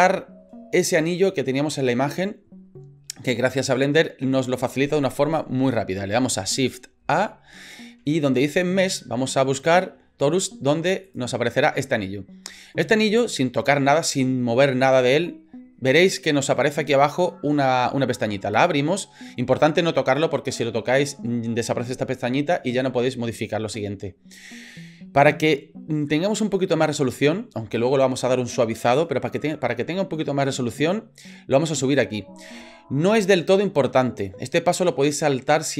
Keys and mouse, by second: 7.0 shift+a, 12.9 middle click.